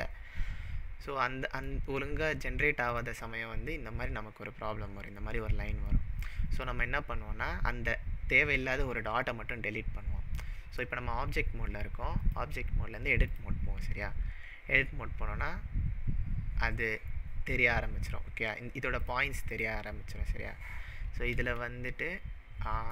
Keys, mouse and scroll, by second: 1.2-1.6 middle drag, 1.8-2.8 scroll up 4, 2.9 click, 5.8 click, 5.9 scroll up 1, 6.0-6.8 middle drag, 12.2-15.2 drag, 19.0 click, 19.6 click, 20.3-21.3 scroll up 4, 21.7-22.9 shift+middle drag.